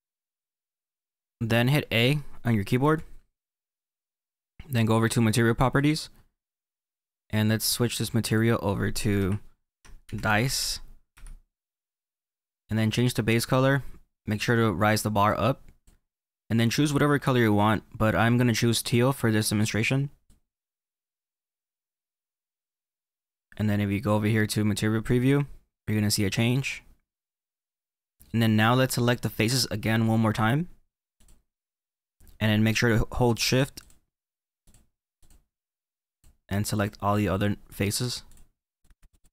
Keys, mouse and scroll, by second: 2.7 a, 5.7-11.3 drag, 12.8-15.9 drag, 25.1 click, 26.2 middle click, 31.1 click, 34.5 shift+click, 35.1 shift+click, 36.0 shift+click, 36.6 shift+click, 37.2-38.7 middle drag, 38.2 shift+click, 38.7 shift+click, 38.9 middle click.